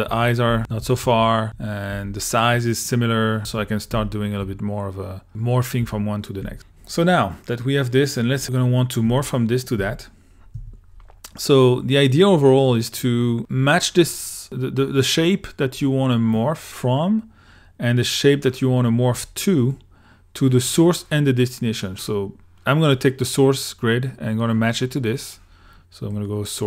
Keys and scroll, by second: 0.0-6.4 typing, 9.1 1, 9.8 2, 10.6 i.